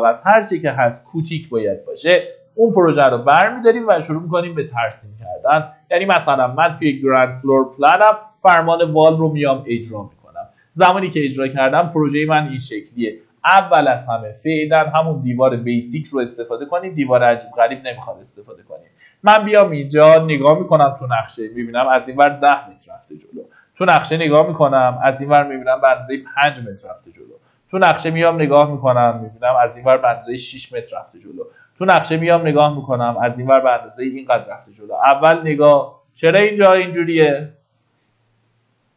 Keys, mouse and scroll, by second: 5.6-6.7 drag, 7.3 middle click, 8.2 typing, 11.7 click, 13.6 Escape, 14.6 click, 19.2-21.0 scroll up 1, 21.4 KP_1, 22.7 KP_0, 27.6 KP_5, 34.1 click, 34.6 Escape, 35.6 scroll up 1, 36.9 scroll down 1, 37.6-38.8 scroll up 1.